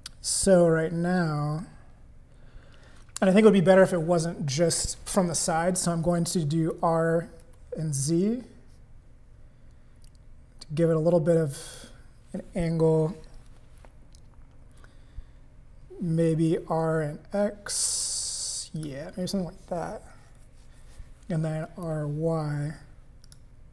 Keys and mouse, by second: 6.7 r, 16.5 r, 21.6 r.